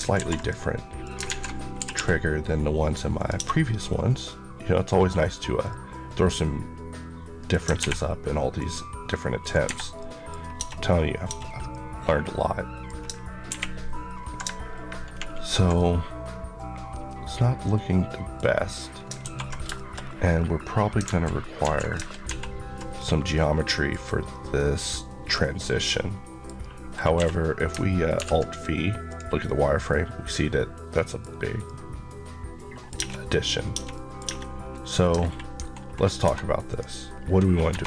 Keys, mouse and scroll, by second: 0.0 ctrl+r, 0.2 ctrl+click, 1.1 alt+z, 1.6 typing, 3.0 click, 3.2 Tab, 3.7 middle click, 5.2 scroll down 1, 5.5 middle click, 8.4 click, 9.6 Escape, 9.8 middle click, 10.2 scroll up 1, 10.8-11.1 scroll up 1, 11.1 Tab, 11.6 middle click, 13.3 ctrl+1, 15.6 ctrl+middle click, 19.1 2, 19.6 shift+middle click, 19.8-20.2 shift+scroll up 2, 20.9 alt+z, 22.2 ctrl+3, 22.8-23.2 scroll down 1, 23.2 middle click, 25.2 scroll down 1, 25.5 middle click, 26.4 scroll up 1, 27.0 q, 28.0 alt+v, 29.0 click, 29.3 middle click, 31.1-31.5 scroll up 1, 31.5 middle click, 32.8 Tab, 32.9-33.3 scroll up 1, 33.6 Tab, 33.6 scroll down 1, 33.8 middle click, 34.0 Tab, 34.5 scroll up 1, 35.0-36.1 ctrl+scroll up 2, 36.1 4, 36.5 click, 37.0 scroll down 1, 37.5 4.